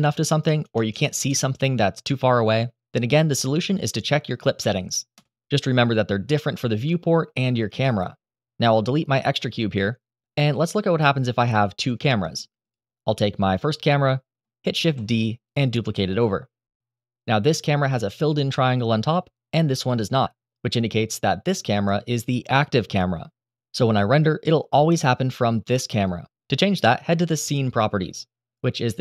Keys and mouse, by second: 0.3 BackSpace, 4.0 click, 9.1 Delete, 10.2 n, 11.0-11.4 middle drag, 11.5 shift+middle click, 11.9 click, 13.6 shift+d, 14.2-14.5 drag, 14.5 r, 15.4-15.7 drag, 15.8 shift+middle drag, 16.2-16.6 middle drag, 17.5 click, 19.5 click.